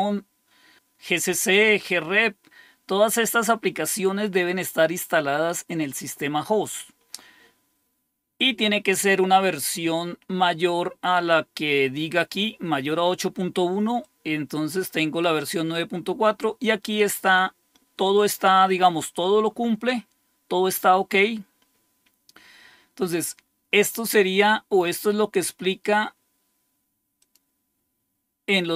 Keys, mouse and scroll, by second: 12.3 click, 14.0-15.2 drag, 27.2 click.